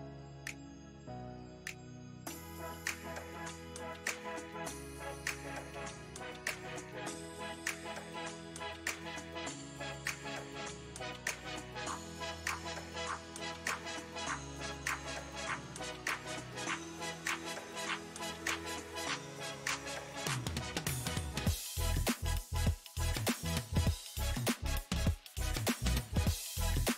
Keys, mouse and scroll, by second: 0.6 space, 6.3 f, 7.4 f, 8.3 click, 9.2 f, 10.1-12.6 drag, 12.6 space, 13.1 f, 13.7-17.2 drag, 17.2-19.0 middle drag, 19.0-20.1 drag, 20.1 middle click, 20.6-21.8 drag, 21.8 middle click, 22.3-23.7 drag, 23.7 middle click, 24.4 click, 25.3-26.9 middle drag.